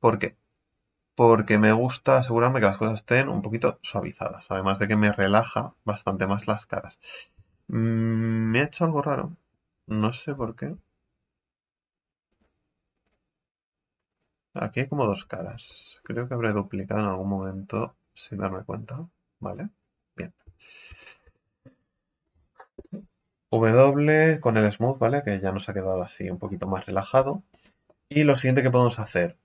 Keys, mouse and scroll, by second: 2.9-4.6 middle drag, 4.6-5.2 scroll up 3, 6.1 middle click, 6.7 scroll down 1, 8.0 ctrl+z, 8.4 ctrl+z, 9.0 middle click, 9.8 Tab, 10.4 Tab, 10.7 a, 12.3 g, 13.8 scroll up 2, 14.1-15.2 right drag, 15.2 a, 15.7 a, 16.0 w, 19.4 right click, 19.8 scroll down 2, 20.2 scroll up 1, 20.4 Tab, 20.9 Tab, 21.2 a, 21.4 a, 22.7 w, 24.8 middle click, 25.7-26.4 scroll up 5, 26.4-27.1 scroll down 6, 27.3-29.4 shift+middle drag.